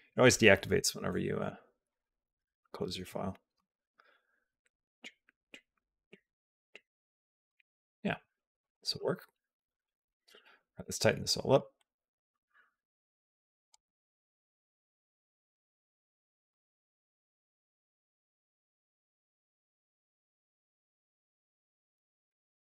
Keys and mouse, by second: 0.6 n, 1.7 click, 2.6 alt+v, 3.4 space, 7.3 space, 7.5 click, 8.1 click, 8.4 click, 8.8 g, 9.9-11.4 drag, 11.6-13.6 drag, 14.1 b, 14.5 s, 16.1 click, 16.3 space, 18.3 click, 18.3 space, 19.1 click, 19.3 g, 20.8 click, 20.9 space.